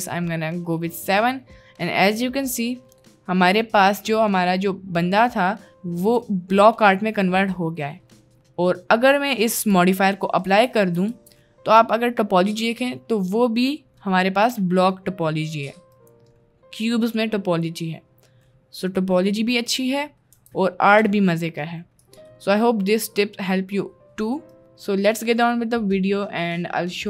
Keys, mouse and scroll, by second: 0.7-1.2 middle drag, 1.6-2.7 middle drag, 3.1-5.9 middle drag, 6.7 middle click, 7.9 middle click, 11.1 ctrl+a, 11.2 Tab, 12.1 middle click, 13.2 middle click, 14.4 middle click, 15.5 middle click, 16.1 middle click, 16.6 middle click, 17.4 middle click, 18.6 middle click, 19.4 middle click, 20.4 Tab, 20.8 middle click, 21.5 middle click, 22.1 middle click, 22.4 middle click, 24.5 middle click.